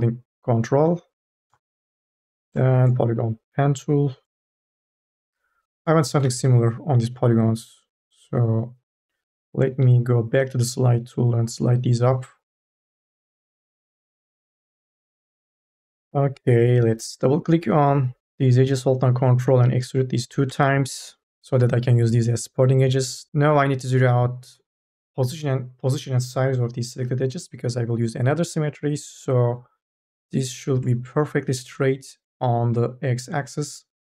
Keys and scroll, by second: 6.0 3, 6.2 e, 8.9 1, 9.5 m, 9.9 o.